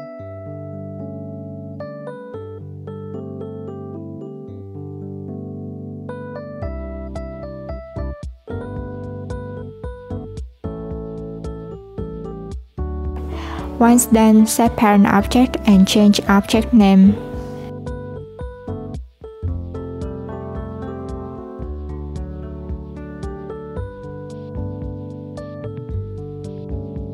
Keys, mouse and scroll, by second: 2.4 click, 3.7 click, 6.5 click, 7.4 click, 8.6 click, 11.7 click, 13.1 /, 13.5 click, 14.0 shift+click, 14.8 ctrl+p, 16.2 click, 17.5 click, 18.9 click, 21.8 click, 24.3-27.1 drag.